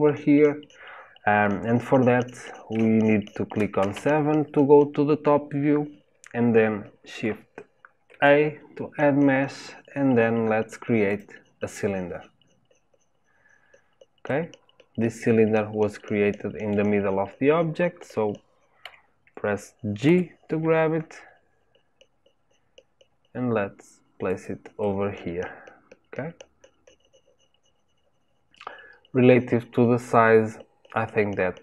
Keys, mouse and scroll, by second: 0.8-1.3 scroll up 1, 1.3-3.7 scroll down 1, 3.7 scroll down 1, 3.9 KP_7, 8.0 shift+a, 14.2-18.8 middle drag, 18.8 KP_7, 20.0 g, 24.8-31.6 middle drag.